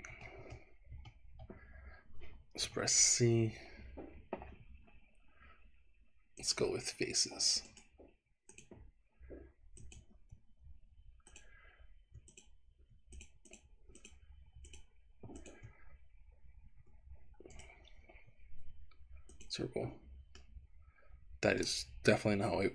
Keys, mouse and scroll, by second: 0.1 ctrl+z, 1.0 ctrl+z, 2.7 c, 8.5 click, 9.8 click, 11.3 shift+click, 12.4 click, 13.2 shift+click, 14.1 shift+click, 14.7 shift+click, 15.4 shift+click, 17.5-19.5 right drag, 20.4-21.7 middle drag, 22.3 ctrl+z.